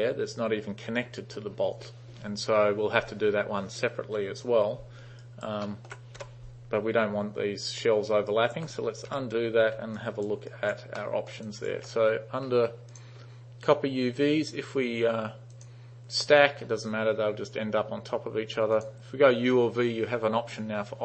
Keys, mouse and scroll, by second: 4.3 t, 5.3 alt+right click, 5.7 alt+middle click, 6.3 u, 8.4 alt+right click, 9.2 ctrl+z, 10.1 alt+click, 10.6 alt+right click, 11.1 alt+middle drag, 11.5 alt+click, 12.9 click, 15.6 click, 18.8 click.